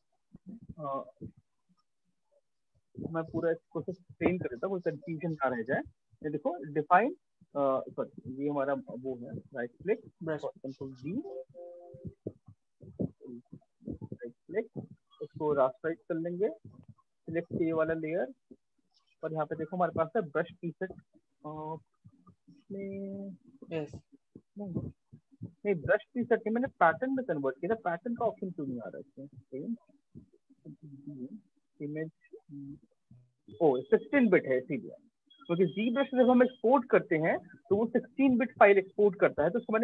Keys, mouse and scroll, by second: 1.5 click, 2.2 click, 2.4 ctrl+click, 3.7 click, 7.8 click, 8.7 right click, 10.4 ctrl+d, 11.7 click, 12.7 ctrl+d, 13.6 right click, 15.1 click, 16.3 ctrl+click, 17.9 click, 28.0 click, 30.0 ctrl+d, 31.1 click, 34.2 click.